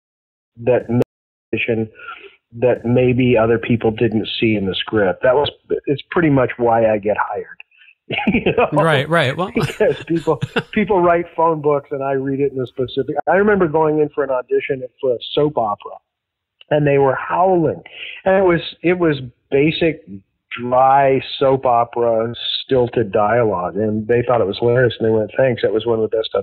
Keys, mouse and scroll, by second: 0.2 ctrl+shift+Delete, 0.4 space, 0.9 space, 1.4 click, 1.4 space, 2.8 click, 3.4-4.4 drag, 5.2 click, 6.0 click, 6.5 ctrl+s, 7.5-9.7 drag, 10.0 click, 11.8 click, 13.1 Delete, 14.2 click, 14.9 click, 15.7 ctrl+s, 16.6-18.8 drag, 19.1 click, 20.1 click, 20.9 click, 22.9 click, 23.9 click, 24.5 ctrl+s, 25.5-26.4 drag.